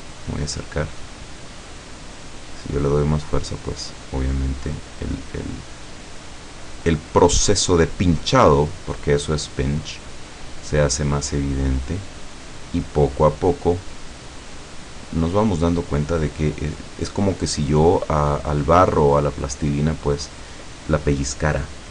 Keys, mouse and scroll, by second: 0.6-1.0 scroll down 1, 1.7-3.2 drag, 3.6-4.9 drag, 5.1-6.4 drag, 6.6-7.7 drag, 8.1 click, 9.7 click, 10.7 click, 11.3-12.3 drag, 12.6-13.6 drag, 14.0 click, 15.0 click, 16.2 click, 17.4 click, 18.9 click, 20.2 click, 21.6 click.